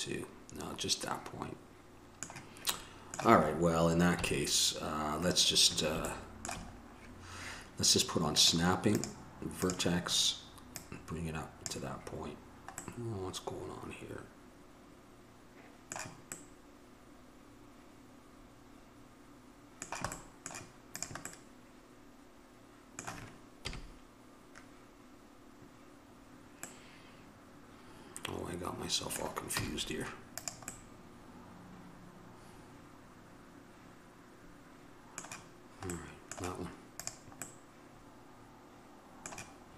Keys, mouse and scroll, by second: 3.0-5.8 middle drag, 4.3 KP_1, 6.3 middle click, 8.0-9.1 middle drag, 9.1-15.6 drag, 20.4 middle click, 21.2-23.8 drag, 23.8 KP_1, 28.4 middle click, 31.0 middle click, 36.2-39.7 middle drag.